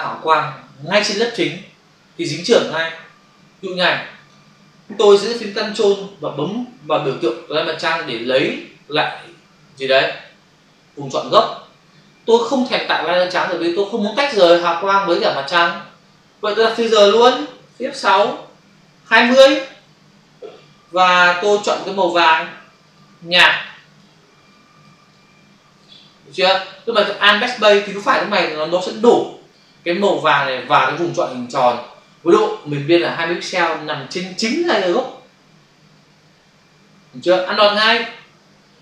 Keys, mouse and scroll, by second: 8.2 ctrl+click, 17.8 shift+F6, 19.0-19.5 typing, 19.6 Return, 21.6 click, 23.0 click, 24.5 click, 25.0 click, 26.3 click.